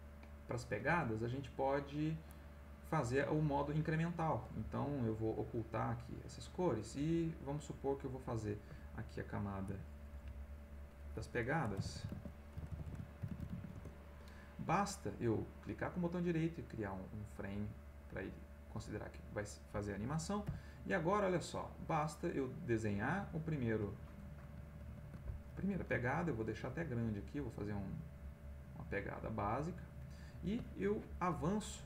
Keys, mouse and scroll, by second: 1.6 click, 6.1 click, 8.1 click, 9.6 Insert, 10.7 click, 11.5-14.0 typing, 15.8-17.0 right drag, 20.4 b, 21.7-24.0 drag, 24.9 ctrl+z, 26.1 shift+click, 26.7-29.9 shift+drag.